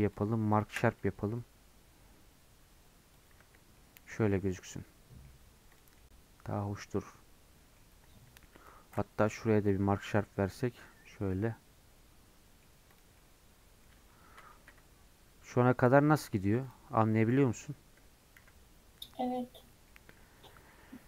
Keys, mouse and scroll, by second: 0.6 alt+shift+click, 3.3 right click, 3.4 Tab, 3.6 scroll down 2, 3.8-5.4 middle drag, 5.4 scroll down 5, 5.7 click, 6.0-7.9 middle drag, 7.9-8.5 scroll up 4, 8.5 Tab, 9.3 alt+click, 10.1 right click, 10.2 Tab, 10.4 scroll down 2, 10.5-13.8 middle drag, 13.8-14.4 scroll down 1, 14.5 shift+middle click, 15.0-16.6 scroll down 2, 16.6-18.4 drag, 18.4 KP_Decimal, 19.5-19.9 scroll down 3, 19.9 middle click, 20.2-20.6 scroll up 1, 20.6 Tab.